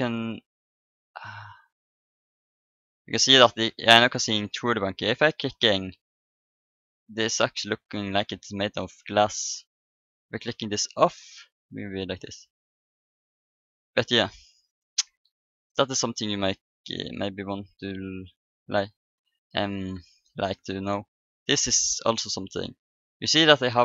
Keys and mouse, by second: 3.7-7.5 middle drag, 10.8-12.6 drag, 11.9-13.9 middle drag, 12.3 right click, 16.4-18.1 drag, 18.3-19.9 right drag.